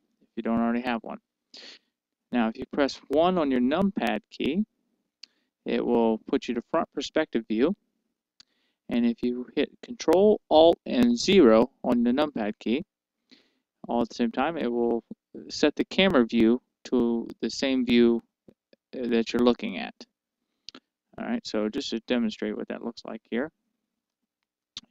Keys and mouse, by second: 4.7 KP_1, 12.3 ctrl+alt+KP_0, 22.0-24.9 middle drag.